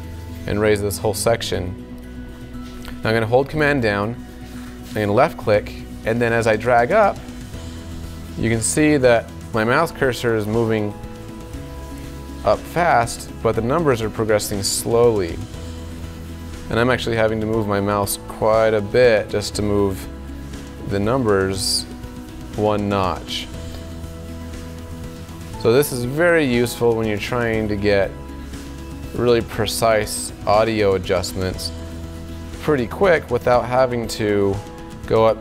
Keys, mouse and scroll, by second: 5.8-35.4 super+drag.